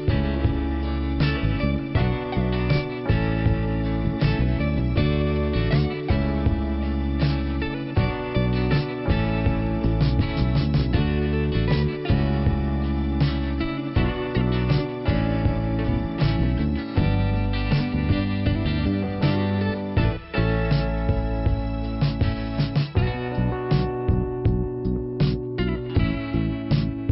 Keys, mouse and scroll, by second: 0.7 click, 4.6 click, 8.2 middle click, 10.9 click, 12.3 click, 18.2 click, 19.4 click, 19.6 click, 22.3-23.0 scroll down 1, 23.0 click, 23.8-24.2 scroll down 2, 26.4 click.